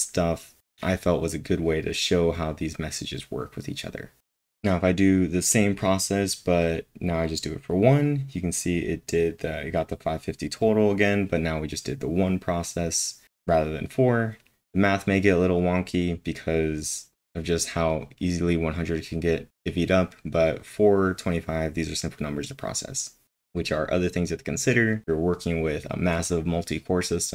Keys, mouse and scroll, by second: 0.0-1.1 typing.